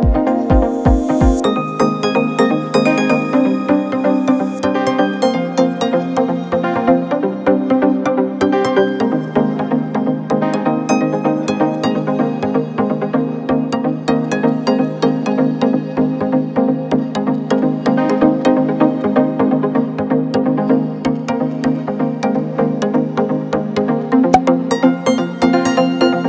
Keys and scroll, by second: 2.2 z, 3.2 space, 5.8 z, 6.7 space, 17.1 F4, 19.3 z, 20.1 space, 22.5 z, 23.2 space.